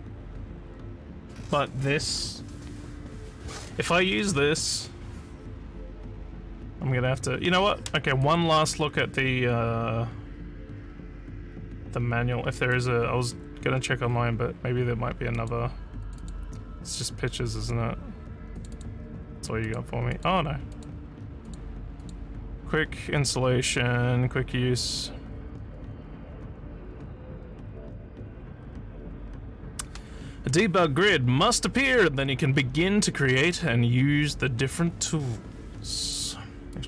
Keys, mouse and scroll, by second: 8.2 click, 12.7 click, 15.3 click, 16.0 click, 16.2 click, 17.6 click, 18.5 click, 18.7 click, 19.6 click, 20.1 click, 20.7 click, 21.5 click, 22.0 click.